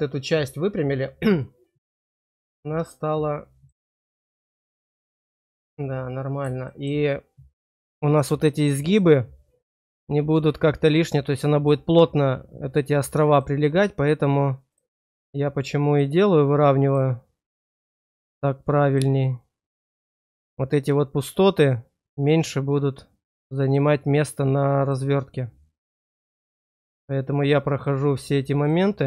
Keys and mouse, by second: 1.4-3.7 drag, 5.9 click, 6.7 shift+click, 13.2 click, 14.6 click, 15.8 click, 16.8 click, 18.1 click, 18.8 click, 19.8 click, 23.6 click, 25.9 click, 26.5 click, 27.7 click, 28.6 click.